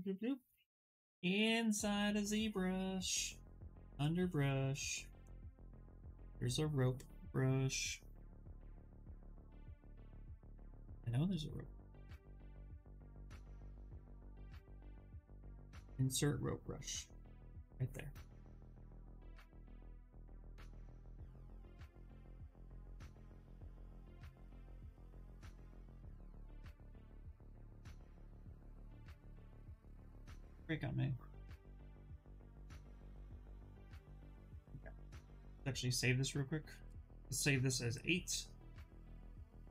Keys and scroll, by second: 1.0 ,, 19.4 s, 33.7 ctrl+z, 38.9 BackSpace, 39.5 8.